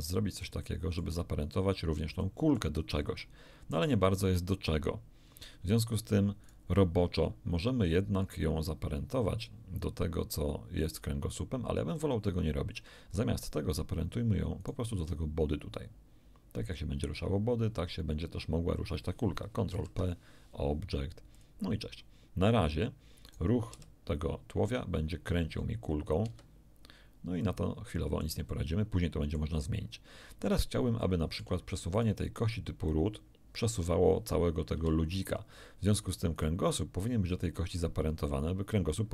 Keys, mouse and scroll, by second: 0.7 shift+click, 1.4 shift+scroll up 1, 2.2 shift+middle click, 6.5 right click, 11.9-13.3 middle drag, 14.6 shift+right click, 19.7 ctrl+p, 21.3 click, 23.3 right click, 23.7 r, 26.2 Escape, 27.4-28.4 drag, 30.5 scroll down 2, 31.0 shift+middle click, 31.9 shift+right click, 32.9-35.3 drag, 34.7 Escape, 36.3 right click.